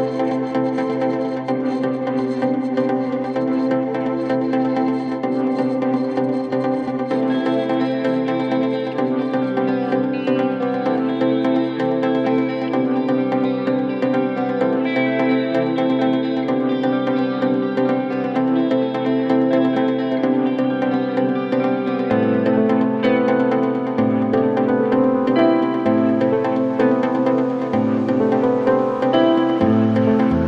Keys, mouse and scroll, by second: 1.0-6.2 drag, 6.2-6.5 scroll up 1, 6.5-7.6 scroll down 1, 7.6-9.0 middle drag, 9.0-12.3 drag, 13.5-15.0 middle drag, 16.0-18.1 drag, 18.1-19.2 middle drag, 19.2-20.7 drag, 22.3 middle click, 23.3 scroll up 1, 23.5-24.0 scroll down 3, 24.0-25.5 middle drag, 26.5-27.8 drag, 27.8 scroll up 1, 28.0 scroll down 2, 28.2-29.7 middle drag.